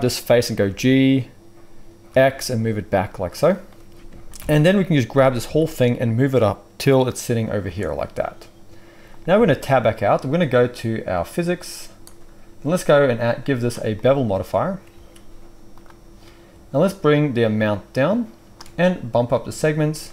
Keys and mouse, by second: 0.6 g, 4.3 ctrl+l, 5.1 g, 9.3 Tab, 9.5 middle click, 11.1 drag, 12.0-20.1 drag, 14.9 ctrl+a.